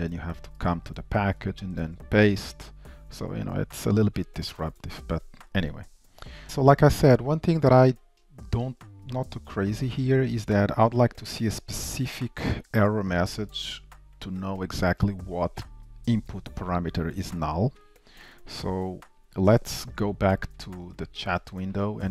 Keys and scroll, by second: 2.1 super+v, 6.4 shift+super+F12, 6.4 ctrl+shift+Down, 12.9 ctrl+shift+Left, 14.3 ctrl+shift+Right, 14.3 alt+shift+Left, 19.8 shift+super+a.